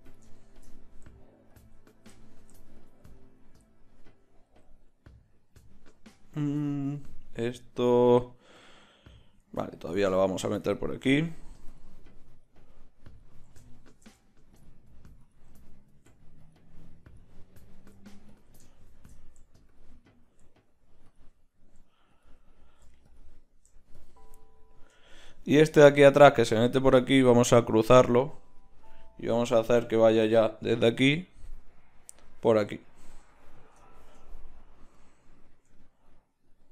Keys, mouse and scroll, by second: 9.9-24.6 drag.